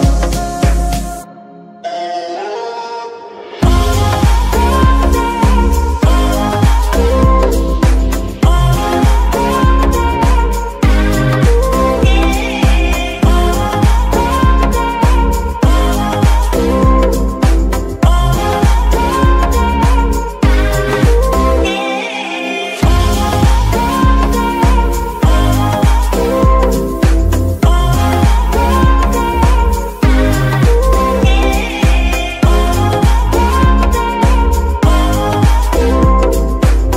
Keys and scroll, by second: 0.7 g, 0.9 Escape, 2.7 g, 2.9 Escape, 4.9 g, 5.1 Escape, 7.0 g, 7.2 Escape, 8.9 g, 9.1 Escape, 11.2 g, 11.3 Escape, 12.7 g, 12.9 Escape, 15.2 ctrl+Tab, 19.6 g, 19.8 y, 20.5 Escape, 21.4 g, 21.5 y, 22.7 Escape, 23.4 g, 24.5 Escape, 25.4 g, 25.5 z, 27.3 Escape, 29.3 g, 30.7 Escape, 31.3 g, 32.6 Escape, 33.8 g, 34.7 Escape, 35.3 g.